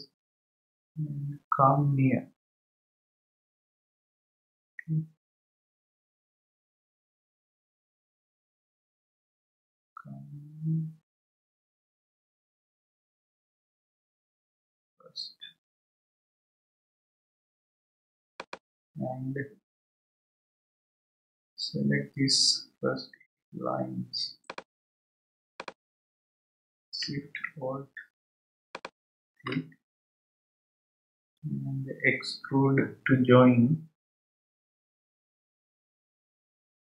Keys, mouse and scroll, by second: 19.7 scroll up 2, 20.6-21.8 scroll up 6, 24.4 click, 25.5 click, 28.7 alt+shift+click, 30.5 alt+shift+click.